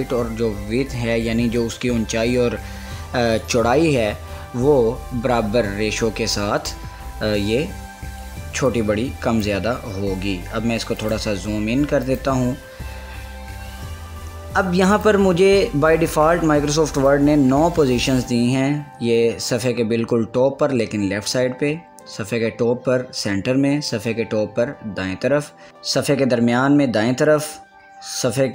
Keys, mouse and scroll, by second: 8.9-11.2 drag, 13.3 scroll up 1, 15.1 click, 17.2 click.